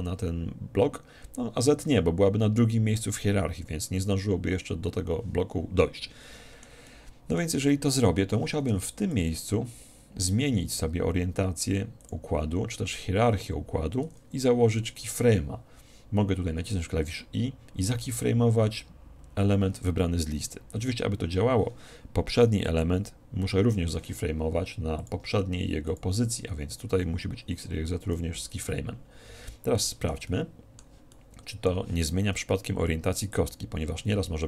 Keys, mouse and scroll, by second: 6.2-9.5 middle drag, 9.1-10.8 drag, 15.0 i, 22.8-24.6 drag, 25.0-26.8 drag, 28.1 i, 29.8-33.4 middle drag, 33.4-34.4 drag.